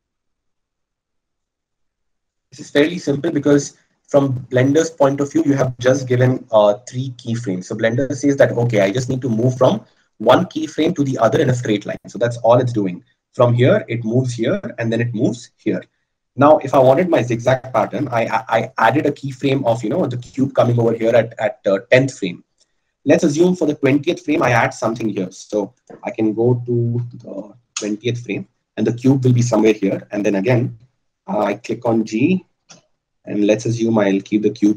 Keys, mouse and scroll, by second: 32.4 g.